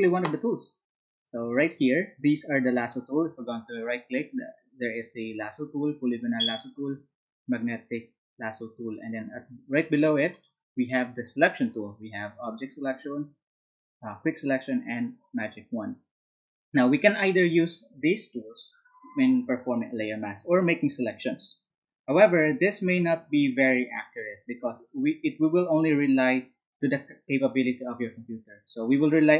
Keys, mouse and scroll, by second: 1.6 alt+click, 2.8 alt+right click, 9.9 alt+click, 10.3 alt+right click, 16.7 alt+click.